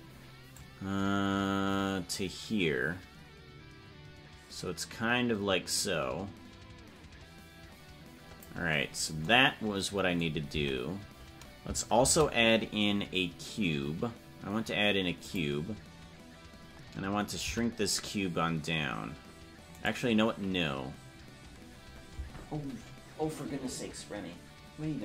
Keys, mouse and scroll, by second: 0.5-8.4 drag, 10.6 Tab, 12.0 shift+a.